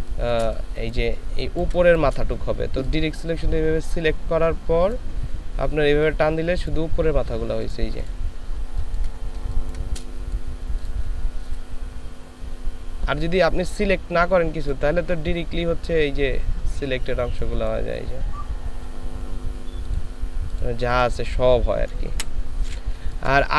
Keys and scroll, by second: 1.3 ctrl+space, 8.7 ctrl+space, 9.4 ctrl+space, 22.2 Delete, 23.2 ctrl+space.